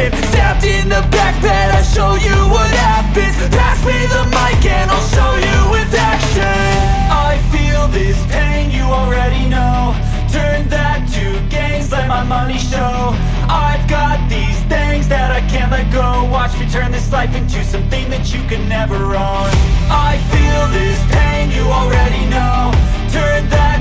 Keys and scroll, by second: 1.7-13.7 typing, 7.7 Right, 11.2 Left, 14.0 Return, 15.2-16.4 typing, 17.7-21.7 typing, 20.0 Return, 20.2 End, 22.2 Return, 22.9 Down, 23.2 Return, 23.3 Return.